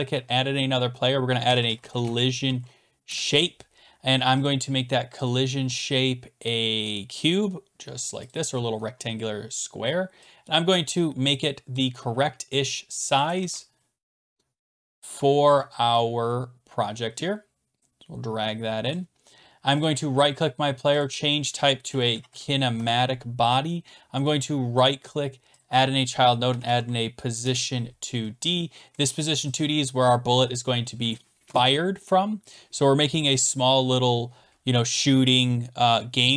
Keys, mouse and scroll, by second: 1.2-3.1 typing, 4.5 click, 5.3 click, 5.4-6.2 typing, 7.5-8.3 typing, 8.3 click, 8.8-9.6 scroll down 7, 9.6-10.3 scroll, 11.7 click, 13.2 click, 13.4 ctrl+z, 13.9 scroll down 10, 14.4 click, 15.1 click, 18.9 click, 19.7 click, 19.8 right click, 21.0 click, 21.7-22.8 typing, 24.3 right click, 24.3-24.8 typing, 25.6 click, 26.3-27.4 typing, 27.4 Return, 27.4 middle click, 29.6 click, 30.1 typing, 31.7 click, 32.5 click, 35.4 click.